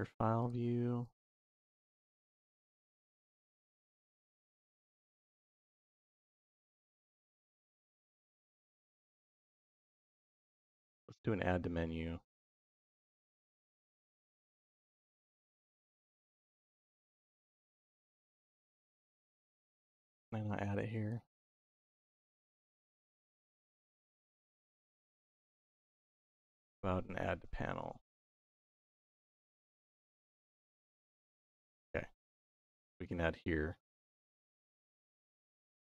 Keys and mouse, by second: 23.0 click, 23.8 click, 24.5 click, 25.7 shift+a, 30.3 click.